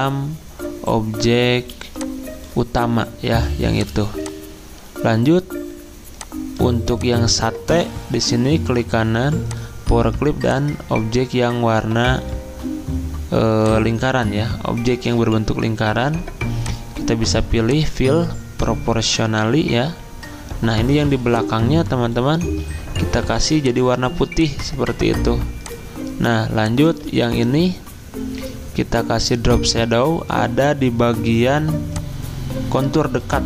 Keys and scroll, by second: 1.7 z, 22.5 ctrl+z, 27.1 ctrl+z.